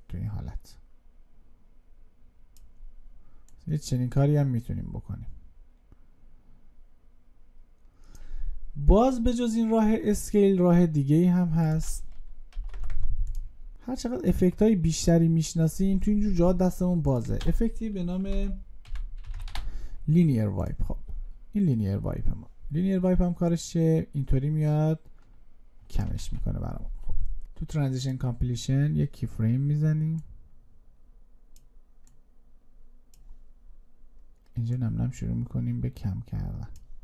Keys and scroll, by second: 17.3 ctrl+space, 26.0 ctrl+z.